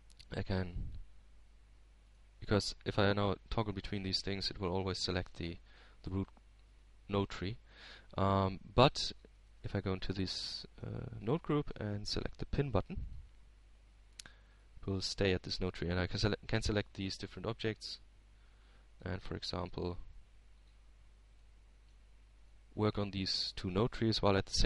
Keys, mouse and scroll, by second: 3.0-3.5 scroll up 2, 5.8 right click, 6.6-7.9 right drag, 7.9-8.5 scroll down 1, 8.5-9.6 middle drag, 9.7 right click, 10.4 right click, 11.3 right click, 12.7 click, 13.2 Tab, 13.9-14.9 middle drag, 14.9 click, 16.7 click, 18.2 right click, 18.8 right click, 19.4 right click, 20.2-20.7 scroll up 1, 21.7-23.9 drag, 24.3-24.6 drag.